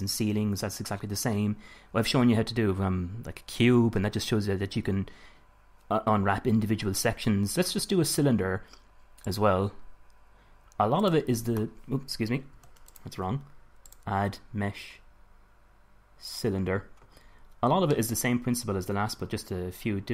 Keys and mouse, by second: 9.5-11.3 drag, 12.7 x, 14.1-15.9 drag, 17.4-18.9 middle drag.